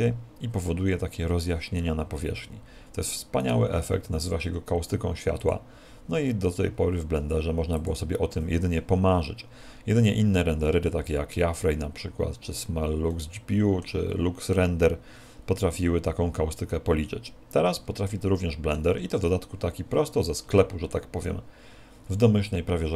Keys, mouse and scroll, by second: 2.2-3.2 scroll down 5, 3.2 scroll down 3, 3.4 right click, 4.1 s, 5.5 click, 7.2 s, 7.9 click, 9.6-11.0 scroll up 5, 11.0-11.5 scroll up 1, 13.1 scroll up 1, 13.4 middle click, 18.1 shift+middle click.